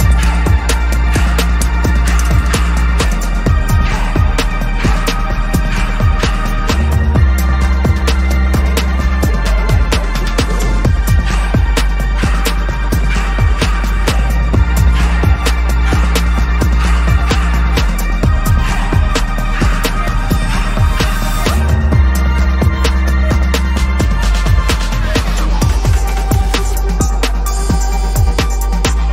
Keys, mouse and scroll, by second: 6.0 double click, 9.0 ctrl+-, 9.2 ctrl+-, 9.4 ctrl+-, 10.0 ctrl+-, 10.1 ctrl+-, 11.0 ctrl+=, 11.1 ctrl+=, 11.4 ctrl+=, 11.5 space, 12.3 ctrl+=, 22.4 alt+shift+click, 24.2 alt+shift+click.